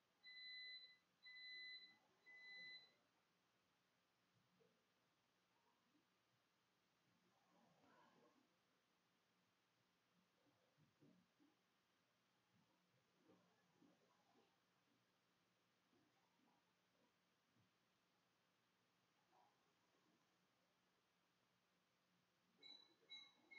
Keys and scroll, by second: 0.0-1.6 typing, 11.1 BackSpace, 12.0 BackSpace, 15.2-16.0 typing, 17.2 ctrl+shift+z, 17.2 ctrl+shift+s, 18.3 typing.